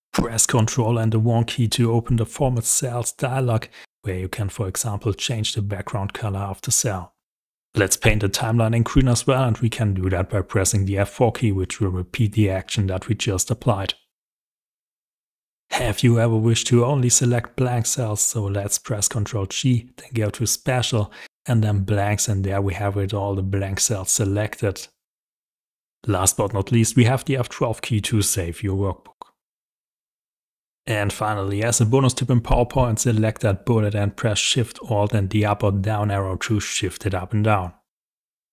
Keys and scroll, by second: 7.3 F4, 15.0 ctrl+g, 25.8 F12, 30.2 alt+shift+Up.